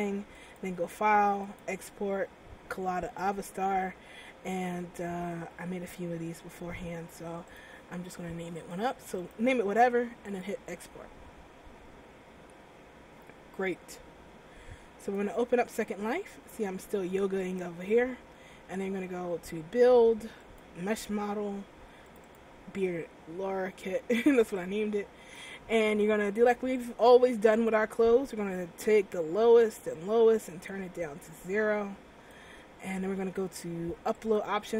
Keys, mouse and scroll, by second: 0.5 click, 12.6 click.